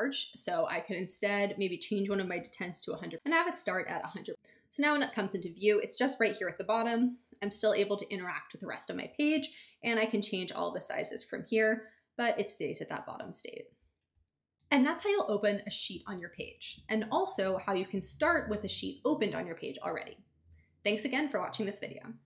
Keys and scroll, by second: 1.8-2.7 typing.